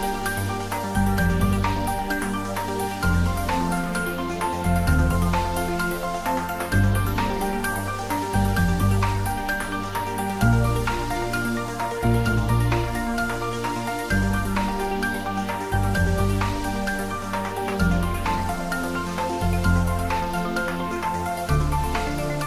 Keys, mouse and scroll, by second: 0.0-0.5 scroll down 1, 1.2 `, 1.7 3, 5.6 g, 6.4 x, 12.4 click, 14.0 g, 14.7 Up, 15.1 Right, 15.9 Up, 16.3 Right, 17.3 space, 19.0 shift+z, 20.9 scroll down 1, 21.7-22.4 middle drag.